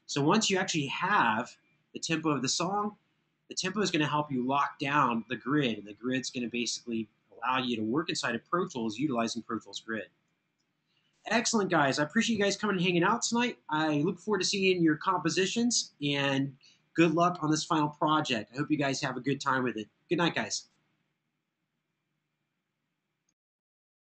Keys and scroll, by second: 8.6 super+], 8.8 super+].